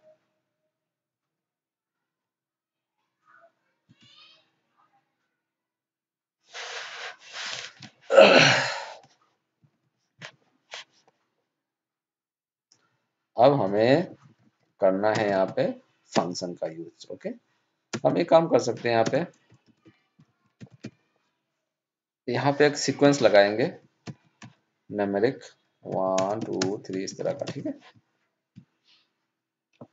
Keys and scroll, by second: 18.9 ctrl+space.